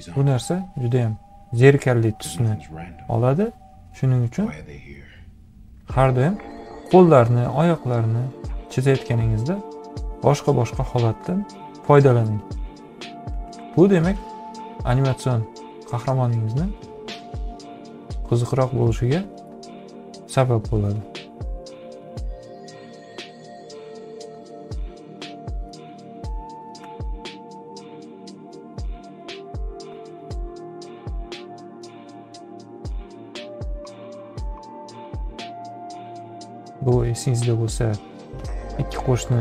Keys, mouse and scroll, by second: 0.1 ctrl+z, 3.6 click, 4.7 click, 6.2 click, 7.4-12.1 drag, 14.4 click, 15.0 click, 15.4 click, 17.2-19.4 drag, 20.1-23.1 drag, 24.0-25.6 drag, 26.9 click, 28.1-31.3 drag, 31.8 ctrl+click, 32.8-34.0 drag, 36.3-39.4 drag.